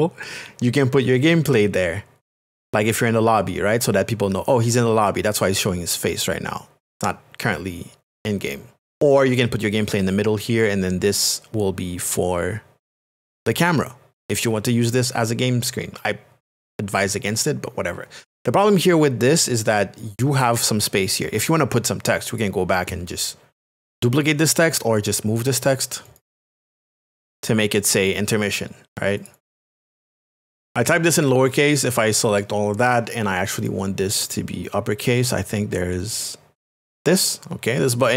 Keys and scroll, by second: 4.0 space, 30.5 n, 30.6 n, 30.7 n.